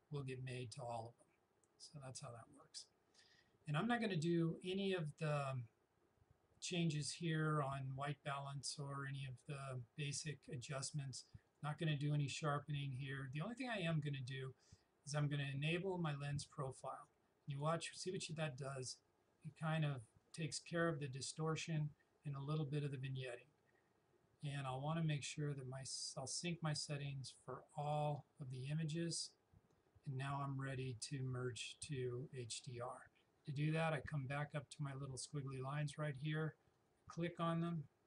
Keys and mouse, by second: 11.5 click, 16.1 click, 25.2 click, 36.8 click.